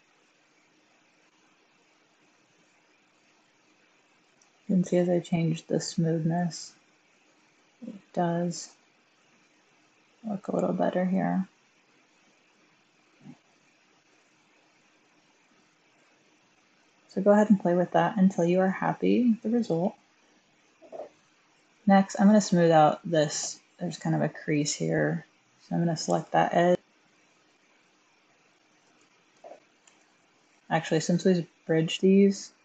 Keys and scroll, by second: 29.7 1.